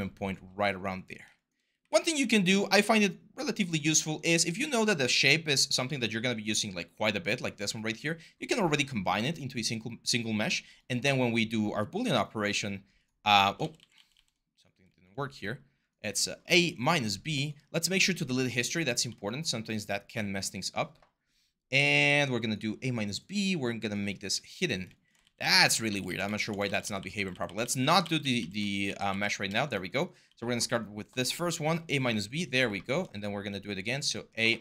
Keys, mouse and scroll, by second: 0.2 r, 1.6 w, 5.8 4, 7.3 5, 13.4 ctrl+z, 13.5 ctrl+z, 13.7 ctrl+z, 25.0 ctrl+z, 25.2 ctrl+z, 25.3 ctrl+z, 26.4 ctrl+z, 27.8 ctrl+z.